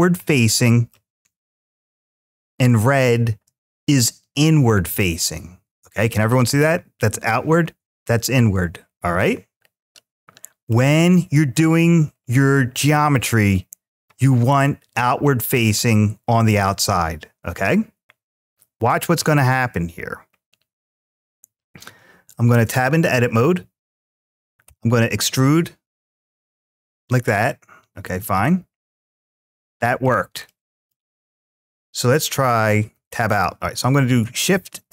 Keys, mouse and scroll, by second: 1.8-3.0 shift+middle drag, 4.7-10.5 middle drag, 10.9-11.4 shift+middle drag, 22.3 Tab, 24.5 e, 26.1 click, 28.2 middle click, 29.2 middle click, 30.3 shift+middle click, 31.2 click, 32.7 Tab, 33.9 shift+a.